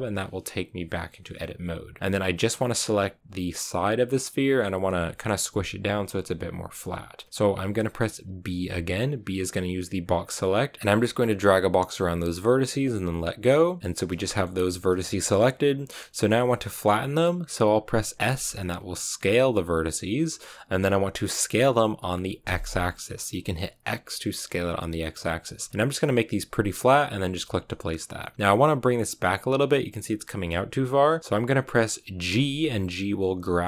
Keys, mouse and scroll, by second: 14.2 shift+middle click, 14.4-18.1 scroll up 1, 18.1 s, 28.2-32.2 scroll up 2, 32.2 g.